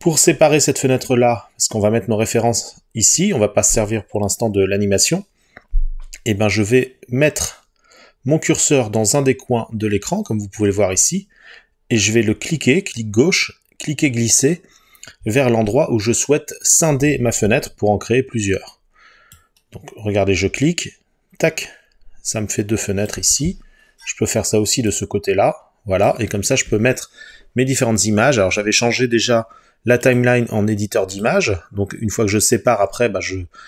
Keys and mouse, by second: 19.4-21.0 drag, 31.3 click.